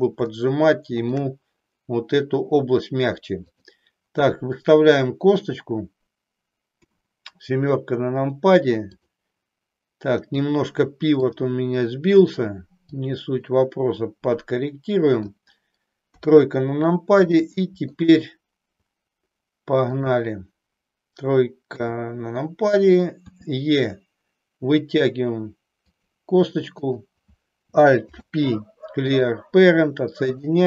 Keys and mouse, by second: 0.2-1.2 shift+middle drag, 3.5 click, 6.7 KP_7, 12.8-15.2 drag, 16.2 KP_3, 17.3 shift+middle click, 20.0 click, 21.6 KP_3, 23.2 e, 26.0 click, 26.7 click, 28.0 alt+p, 30.2 click.